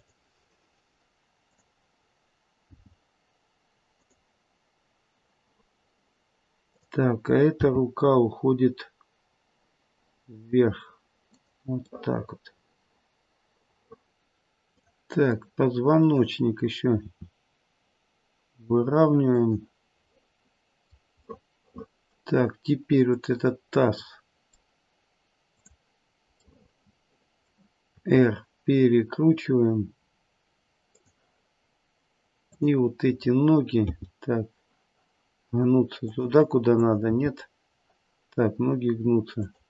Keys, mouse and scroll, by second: 1.4 click, 2.6 g, 6.6 click, 7.5 g, 11.9 middle click, 12.1 middle click, 14.6 click, 15.4 middle click, 17.0 r, 20.2 middle click, 21.4 middle click, 22.0 middle click, 23.1 click, 23.9 middle click, 24.1 middle click, 25.5 click, 26.4 middle click, 26.8 middle click, 27.2 middle click, 27.9 middle click, 27.9 r, 32.5 click, 33.9 g, 36.7 click, 37.4 g.